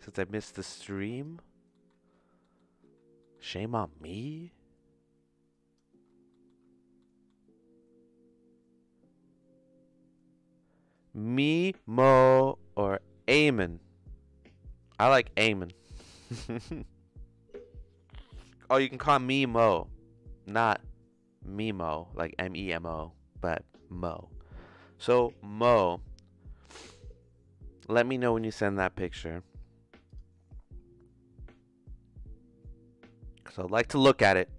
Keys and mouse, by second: 0.8 click, 1.7 middle click, 2.4 middle click, 3.2 middle click, 4.0-5.7 drag, 6.3 middle click, 7.0 middle click.